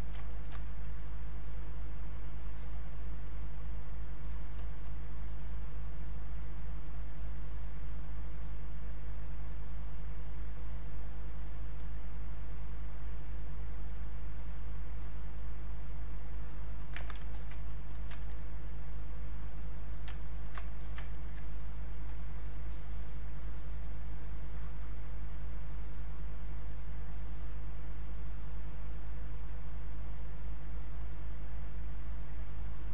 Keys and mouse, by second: 0.3 ctrl+right click, 0.6-10.2 drag, 10.2 click, 14.3-17.0 drag, 17.0 ctrl+z, 17.3 alt+click, 17.7 ctrl+right click, 18.7 click, 20.2 ctrl+right click, 20.7 alt+click, 21.1 ctrl+right click, 22.6-25.9 ctrl+drag, 25.9-28.7 ctrl+drag, 28.7-30.1 ctrl+drag, 30.1-32.1 ctrl+drag, 32.1 ctrl+click.